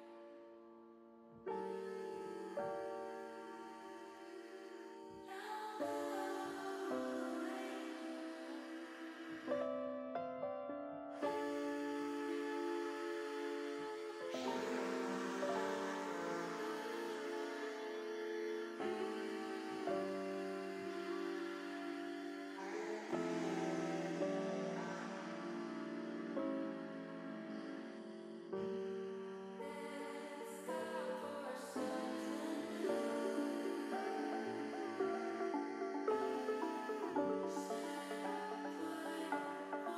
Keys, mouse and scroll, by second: 0.9 click, 2.5 middle click, 3.1 middle click, 4.0 shift+middle click, 4.4-6.6 middle drag, 7.2 click, 8.9 s, 10.3 click, 11.6 e, 13.7 click, 14.1 s, 15.7 click, 16.1 middle click, 16.7 middle click, 17.6 ctrl+z, 18.1 ctrl+z, 18.5 ctrl+z, 19.3 middle click, 20.3 click, 22.2-23.2 drag, 23.6 middle click, 25.7 middle click, 27.2 e, 27.9 s, 29.5 click, 29.8 middle click, 31.0-34.5 drag, 35.1 click, 35.6-36.6 middle drag, 36.9 middle click, 38.1 middle click, 39.3 click.